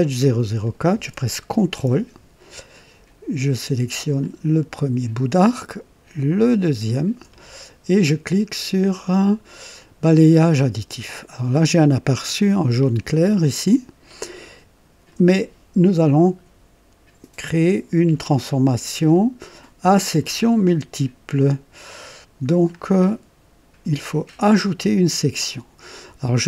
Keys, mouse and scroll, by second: 0.2 scroll up 1, 3.9 ctrl+click, 4.7-5.5 drag, 6.6 click, 7.3 typing, 9.7 click, 11.8 click, 14.2-15.3 drag, 19.0-20.4 drag, 21.9-22.8 drag, 25.2 click.